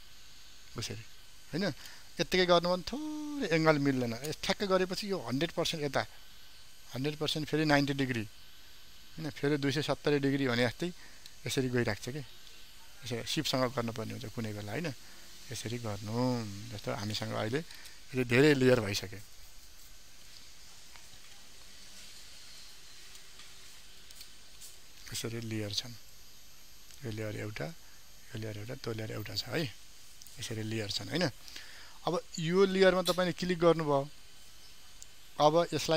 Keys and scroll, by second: 21.0 ctrl+t.